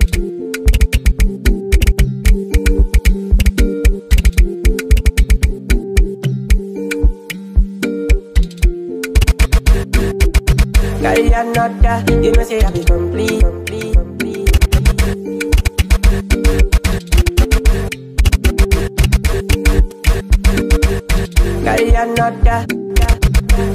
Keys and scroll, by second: 0.0-6.7 typing, 7.9 s, 9.1-10.7 typing, 12.8 g, 14.3-23.7 typing.